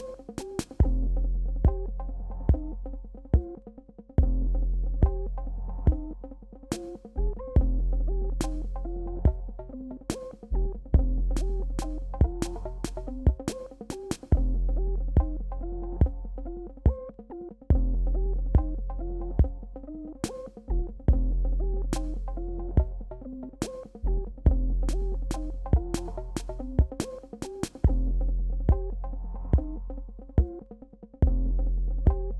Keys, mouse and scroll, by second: 3.0 alt+scroll up 1, 4.2-5.6 alt+scroll down 1, 9.2 ctrl+Num_Lock, 9.2-10.0 alt+scroll down 1, 10.3 click, 10.3 click, 14.0 ctrl+Num_Lock, 14.0 click, 14.2 ctrl+click, 16.0 ctrl+d, 16.6 ctrl+click, 18.0 b, 19.4 click, 21.0 shift+x, 21.2 click, 24.6-29.4 drag.